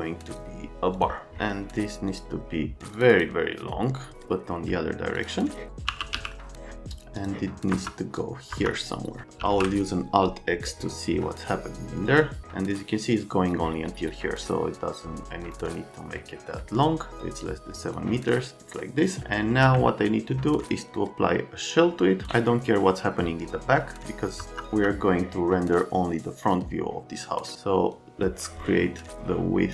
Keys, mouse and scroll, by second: 0.2 click, 1.0 click, 2.1 click, 2.9 click, 3.1 click, 5.1 click, 5.9 r, 6.3 middle click, 7.7 F3, 8.1 middle click, 8.6 F3, 9.4 alt+x, 24.4 F3, 24.8 F3.